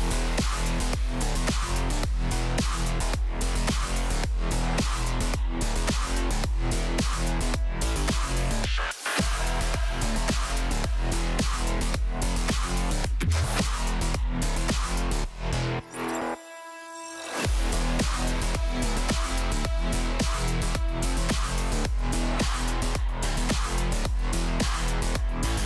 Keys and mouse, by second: 2.6 click, 3.3 click, 3.6 click, 3.9 click, 5.7-8.1 shift+drag, 9.4 shift+click, 10.3 shift+click, 11.8 shift+click, 13.7 middle click, 15.0-18.1 shift+drag, 18.7-20.5 shift+drag, 21.0-22.8 middle drag, 23.5-25.6 shift+drag.